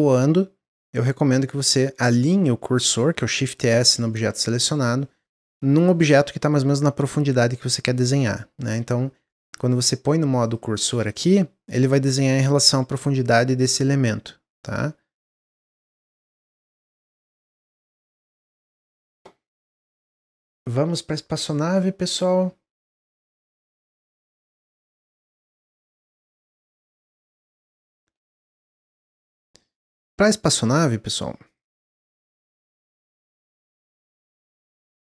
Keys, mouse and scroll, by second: 7.9-10.3 middle drag, 10.3-13.4 drag, 15.9-20.2 middle drag, 20.2-21.4 drag, 28.2 click, 28.5 a, 30.5 ctrl+s, 31.3 click, 31.8 ctrl+s, 32.6-33.7 drag, 34.9 click.